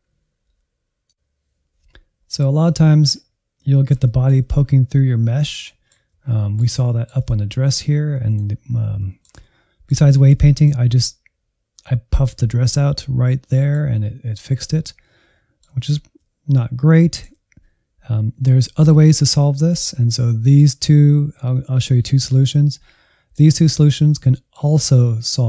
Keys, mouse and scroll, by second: 0.8 middle click, 1.5-1.8 scroll up 4, 1.8-3.1 drag, 3.1-3.5 scroll up 1, 3.5-5.1 middle drag, 5.1-5.6 scroll down 3, 5.6-8.6 middle drag, 8.6-9.0 scroll up 1, 9.0-10.1 shift+middle drag, 10.1-10.4 scroll up 1, 10.4-14.6 middle drag, 14.6-15.0 scroll down 2, 15.0-23.9 middle drag, 23.9 middle click, 24.8-25.4 scroll up 1.